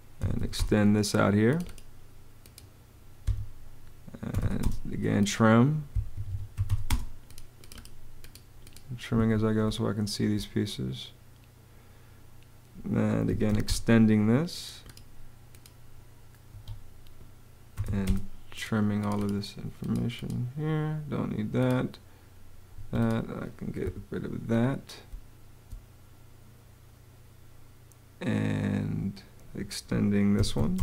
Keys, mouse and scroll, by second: 0.0-0.7 typing, 3.1 Escape, 4.3 r, 4.4 space, 6.0 Escape, 6.1-7.0 typing, 9.0 Escape, 9.5 space, 12.9-13.8 typing, 16.3 Escape, 17.3-18.2 typing, 22.6 Escape, 23.7 BackSpace, 24.9 space, 30.0-30.8 typing.